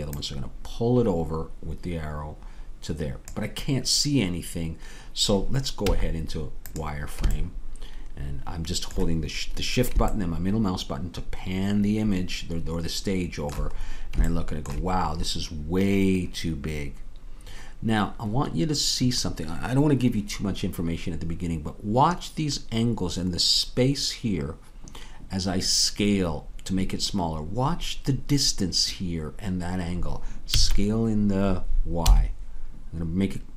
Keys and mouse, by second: 0.1-3.3 drag, 5.9 z, 7.3 middle click, 30.6 s.